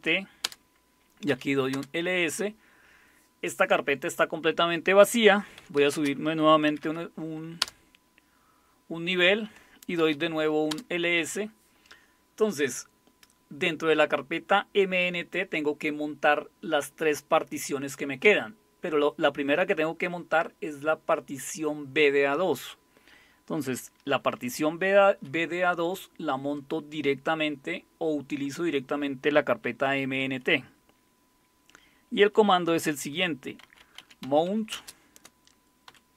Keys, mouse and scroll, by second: 0.4 Return, 1.0-1.8 typing, 5.3-7.6 typing, 9.8-10.7 typing, 33.4-36.1 typing.